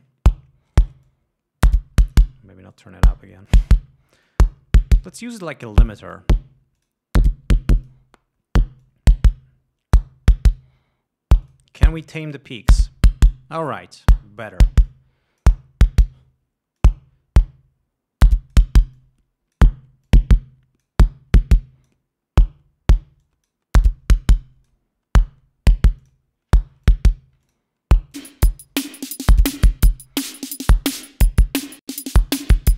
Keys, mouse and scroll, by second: 1.4-2.7 drag, 3.1-4.1 drag, 4.7-5.1 drag, 5.4 click, 6.3 click, 7.2 click, 8.2 click, 9.2-10.6 drag, 11.9 click, 12.8 click, 15.3 click, 17.2-19.1 drag, 19.4-20.2 drag, 20.5-21.4 drag, 21.8-22.5 drag, 23.6-24.1 drag, 24.7-25.3 drag, 26.4 click, 27.3 click, 27.9-29.0 drag, 30.6 ctrl+scroll down 2.